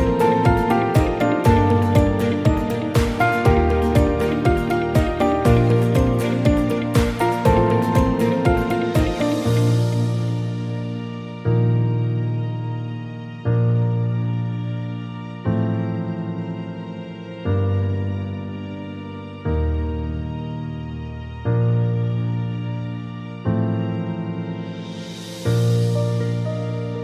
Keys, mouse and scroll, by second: 1.5-5.7 right drag, 6.7-7.9 right drag, 10.9-13.8 right drag, 14.2-15.5 right drag, 15.9-17.2 right drag, 18.1-19.3 right drag, 20.3-22.5 right drag, 23.5-24.6 right drag.